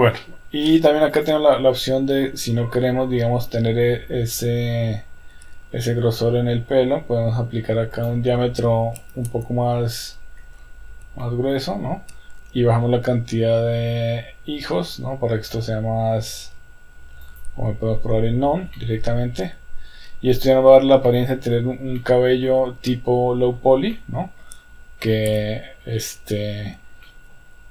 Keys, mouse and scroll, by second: 1.1 click, 8.1-10.1 drag, 11.4-12.4 shift+middle drag, 17.3 click, 18.9-20.7 middle drag, 21.2 middle click, 22.1-22.7 middle drag, 23.0-23.7 middle drag, 24.0-24.8 middle drag, 25.5 KP_1, 27.1-27.7 shift+middle drag.